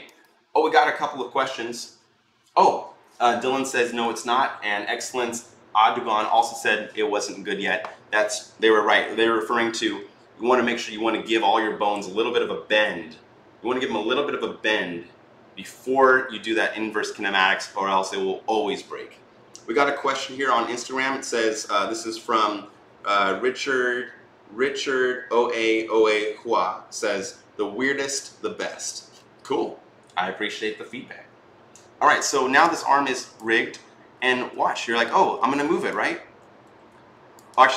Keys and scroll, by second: 34.4 e, 37.5 ctrl+z.